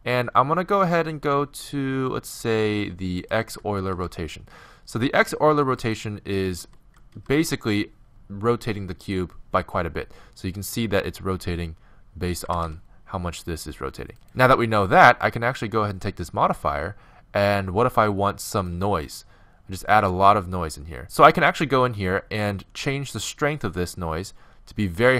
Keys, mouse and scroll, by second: 3.2-4.9 drag, 3.8 shift+h, 5.8-7.6 right drag, 6.6 g, 7.6-9.8 middle drag, 12.5 g, 15.9-17.6 drag, 21.0 Home, 22.6 click.